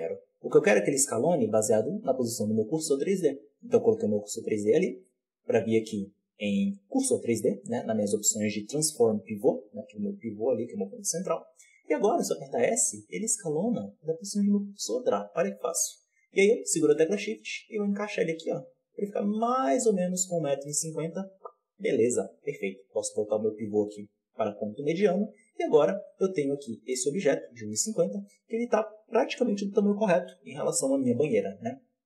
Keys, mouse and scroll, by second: 0.7-2.4 scroll up 1, 2.4-3.4 scroll up 1, 3.4 scroll up 1, 5.1-12.1 drag, 12.1 s, 21.6-25.2 drag, 25.2-26.0 middle drag, 25.2-26.0 scroll down 1, 26.0 right click, 26.4 right click, 26.8 right click, 27.1 right click, 27.5 right click, 31.4-32.0 scroll up 3.